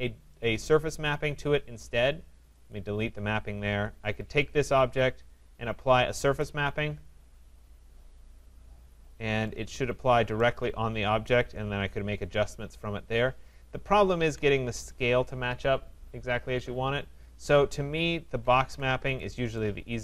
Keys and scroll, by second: 14.2 ctrl+z.